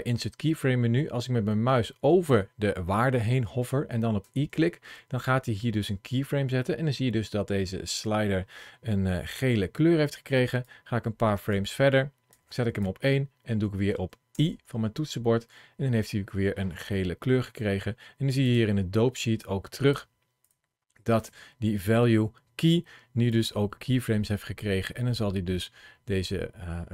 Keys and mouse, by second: 4.1 i, 10.5 click, 12.1 click, 14.2 i, 16.8 middle click, 18.3 click, 19.2 click, 23.1-26.9 drag.